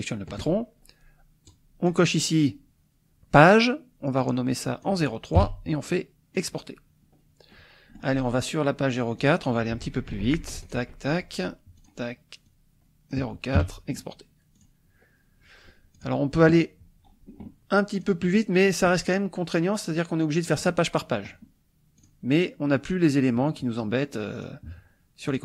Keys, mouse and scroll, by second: 1.5 click, 4.2 click, 5.4 KP_3, 6.4 click, 7.5 click, 9.2 click, 10.1 ctrl+shift+r, 10.7 ctrl+shift+click, 11.8 click, 12.5 click, 13.6 KP_4, 14.6 click, 15.9 click, 18.0 click, 18.6-19.1 drag, 20.4 click, 22.0 click, 24.4 click, 25.3 click.